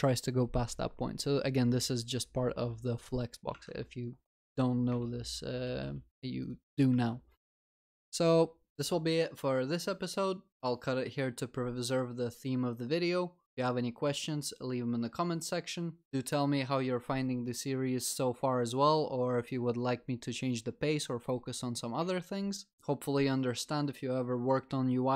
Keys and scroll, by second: 5.7 ctrl+s.